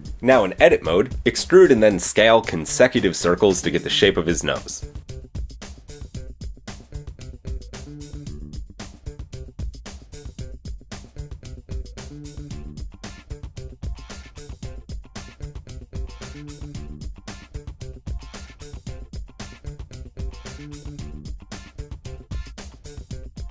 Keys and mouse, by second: 0.2 Tab, 2.8 e, 5.7 r, 16.0 e, 17.6 middle click, 20.4 KP_1, 21.4 a.